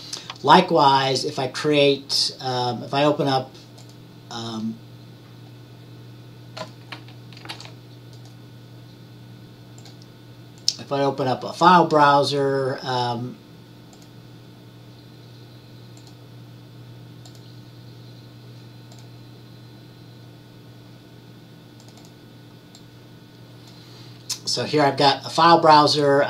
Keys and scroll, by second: 7.6 ctrl+t.